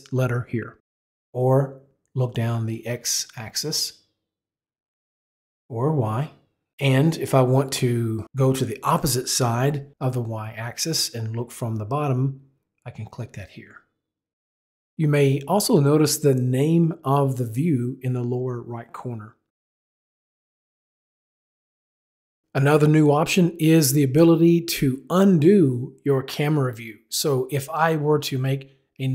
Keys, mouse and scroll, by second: 3.2 click, 5.6 click, 12.4 click, 16.0 click, 19.0 click, 20.1 middle click.